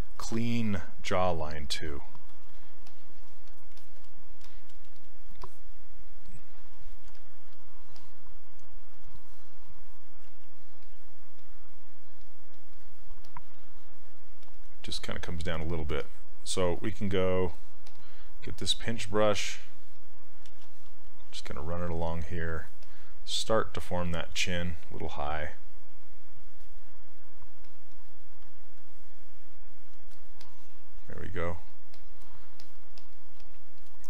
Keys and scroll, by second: 2.9 s, 10.3 s, 24.2 ctrl+z, 33.4 s.